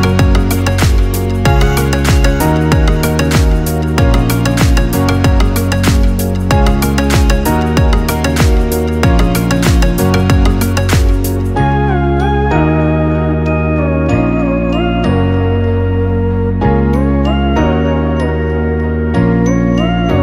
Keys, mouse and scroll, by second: 0.5 scroll down 1, 0.7 middle click, 1.6 right click, 2.0 right click, 2.7 right click, 3.0 r, 4.3 right click, 4.9 g, 6.0 r, 7.1-7.5 scroll down 1, 7.5-11.3 middle drag.